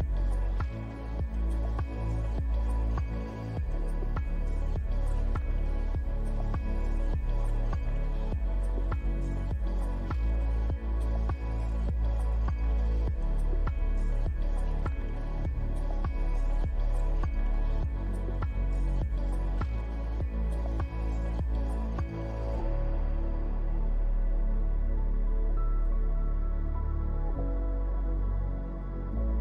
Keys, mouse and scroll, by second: 0.5 middle click, 1.1 click, 3.2 shift+click, 5.2 ctrl+l, 12.1 middle click, 13.1 click, 13.4 scroll up 2, 13.8 middle click, 14.5 scroll down 1, 14.8 middle click, 15.8-17.0 scroll up 2, 17.0-17.5 scroll down 2, 17.5-17.9 scroll up 2, 19.6 click.